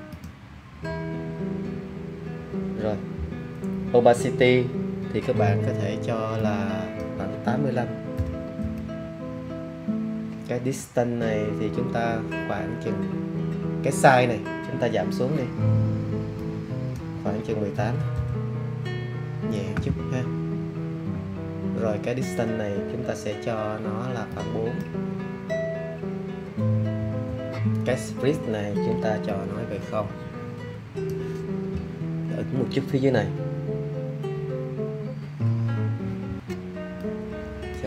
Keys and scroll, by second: 8.1 8, 8.5 5, 17.7 1, 18.1 8, 26.9 4.